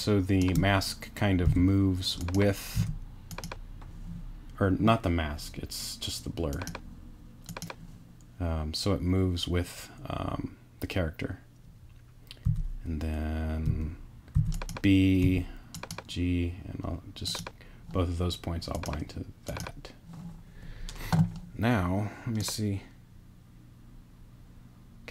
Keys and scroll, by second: 1.4 b, 2.7 g, 12.4 b, 13.6 g, 14.3 b, 15.2 g.